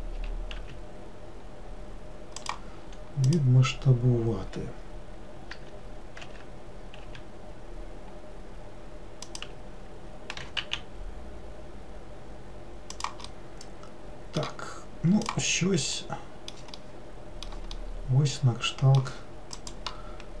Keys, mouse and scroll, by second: 0.3 s, 3.3 click, 5.6 r, 10.5 g, 13.4-15.3 middle drag, 15.3 click, 16.0-20.4 middle drag.